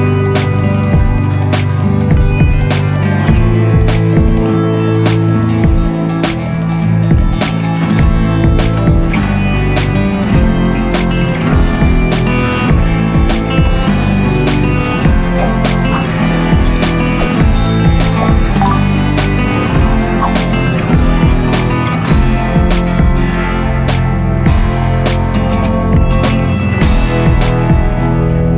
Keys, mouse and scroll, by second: 3.1 ctrl+shift+n.